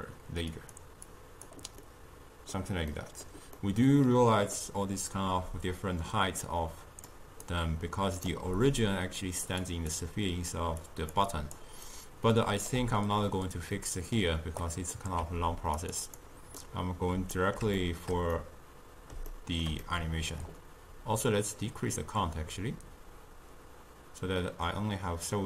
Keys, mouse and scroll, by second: 1.1 click, 1.9-5.5 middle drag, 5.5 d, 5.8-7.1 drag, 7.1-12.8 typing, 7.5 right click, 9.3 click, 9.7 click, 10.9 click, 11.4 click, 12.0 right click, 13.8-14.7 middle drag, 14.7-15.3 drag, 15.3 g, 16.1 click, 16.7-21.6 middle drag, 21.6-24.6 drag.